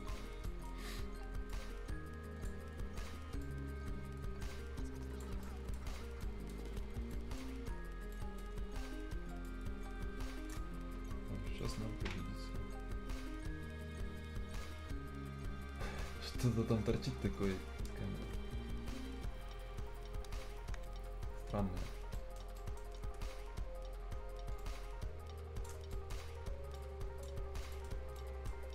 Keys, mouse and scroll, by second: 0.1 scroll up 1, 0.5 right click, 0.8 scroll up 1, 1.8 click, 2.6 scroll down 1, 3.4-5.4 drag, 5.4 right click, 5.8 scroll down 1, 6.2 right click, 6.6 scroll down 1, 6.7 scroll up 1, 7.1 right click, 7.5 scroll down 1, 8.1-8.7 scroll up 2, 8.1 right click, 9.5-11.6 shift+drag, 12.6-13.0 scroll up 1, 13.3 scroll down 1, 13.7-15.3 scroll up 1, 15.3-16.3 scroll down 1, 16.3-17.0 scroll up 1, 22.2 right click, 22.4 scroll down 1, 22.6 right click, 22.9 scroll up 1, 24.6 shift+click, 25.8 scroll down 1, 25.9 right click, 26.3-26.8 scroll up 1, 26.8 click, 27.6 scroll up 1, 27.9 scroll down 1, 28.2 right click, 28.6 scroll up 1.